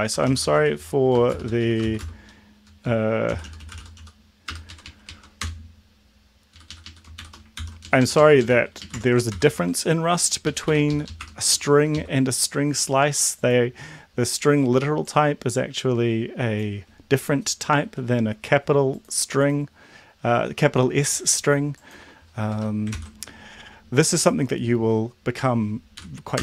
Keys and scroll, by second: 0.0-4.5 typing, 4.7 Right, 4.9 Right, 5.0 Right, 5.4 Return, 6.5 Up, 6.7 Up, 6.8 Up, 7.2 shift+End, 7.5 ctrl+c, 7.8 Down, 8.0 Down, 8.1 Down, 8.3 Down, 8.8 Up, 9.3 ctrl+v, 9.5 Down, 10.5 ctrl+Up, 10.6 End, 10.9 Left, 11.1 Left, 11.1 2, 11.6 Up, 11.9 Left, 22.5 BackSpace, 22.9 ctrl+s, 26.0 Up, 26.3 Return.